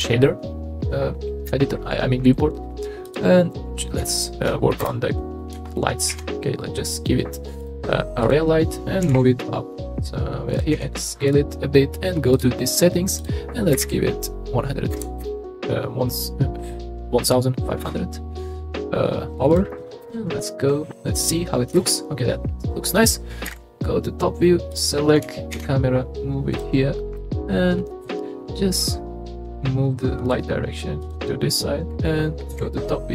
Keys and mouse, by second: 0.1 click, 3.0 click, 4.8 KP_0, 6.1 shift+a, 9.0 g, 9.1 z, 10.7 s, 12.3 click, 13.3-17.8 drag, 19.5 click, 20.0 KP_0, 21.7 KP_0, 23.5 KP_7, 24.7 click, 25.5 shift+d, 27.1-28.0 middle drag, 28.8 click, 31.1 click, 32.5 KP_7.